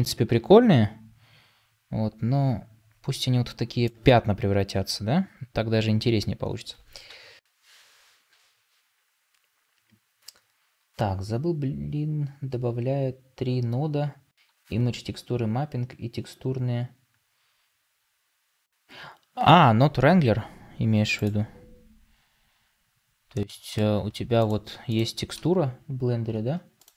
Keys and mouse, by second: 24.3 click.